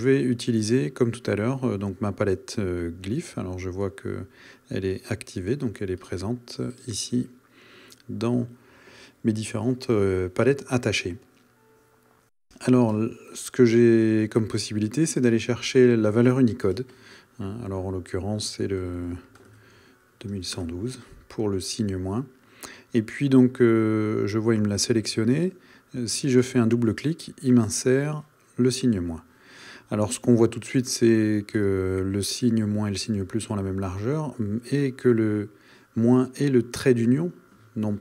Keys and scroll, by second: 20.5 Return.